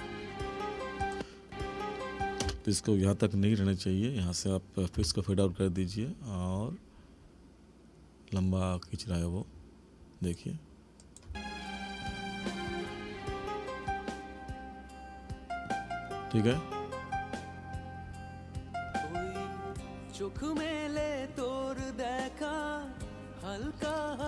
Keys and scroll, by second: 2.4 space, 11.3 space.